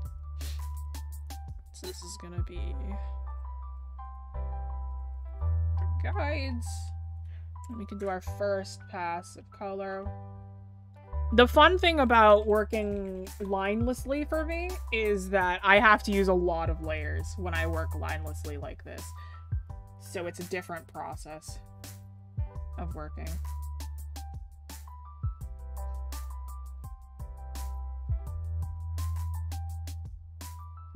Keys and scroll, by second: 8.6-9.8 scroll up 1, 15.2-15.5 scroll up 1.